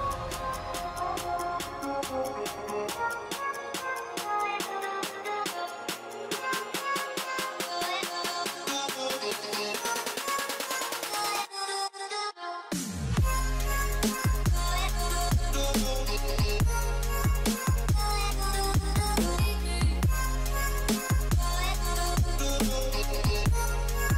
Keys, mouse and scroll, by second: 4.2 alt+click, 5.7-6.1 alt+scroll down 3, 7.4 alt+scroll up 1, 8.3 space, 10.5 scroll down 1, 13.7 ctrl+z, 19.2 shift+click, 22.0 shift+click, 22.7 shift+click, 23.2 shift+click.